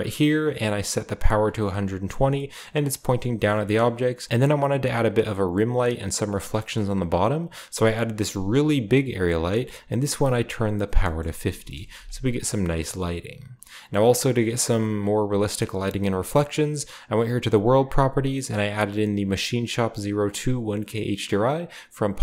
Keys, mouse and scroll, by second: 1.6-4.3 middle drag, 1.7-3.0 scroll up 2, 3.0-3.5 scroll down 2, 3.9-4.3 shift+scroll up 2, 5.5 scroll down 1, 6.4 scroll down 1, 6.5-7.7 middle drag, 7.7 click, 8.0 scroll down 2, 8.3 g, 11.5 KP_0, 16.5 click, 17.5 click.